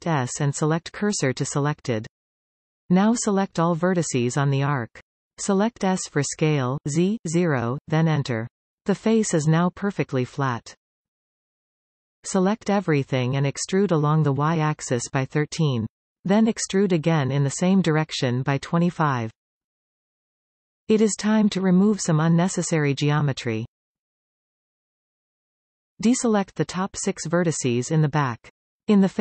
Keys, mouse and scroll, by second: 1.8 b, 4.7 s, 7.3 scroll down 3, 8.1 KP_3, 9.4-10.9 scroll down 2, 10.9-12.3 middle drag, 12.3-13.2 scroll down 3, 13.2 a, 13.4-13.7 scroll down 4, 13.7 middle click, 14.5 scroll up 2, 15.0 middle click, 15.4 e, 17.7 e, 22.1-27.9 middle drag, 27.9 shift+click, 28.5 shift+click.